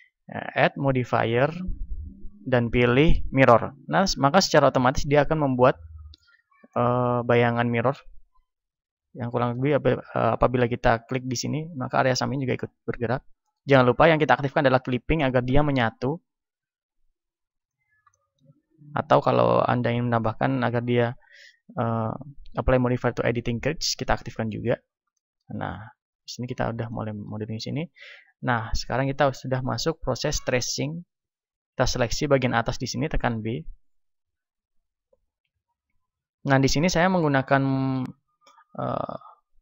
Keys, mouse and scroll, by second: 0.6-3.4 middle drag, 4.4-11.0 middle drag, 11.0-12.8 right drag, 11.6-17.8 drag, 12.8 ctrl+z, 17.8-24.1 middle drag, 24.1-25.5 drag, 25.0-29.6 middle drag, 25.8 a, 28.6 b, 30.3-33.0 middle drag, 31.3 a, 32.1 b, 36.8-38.8 middle drag, 38.8-39.6 drag.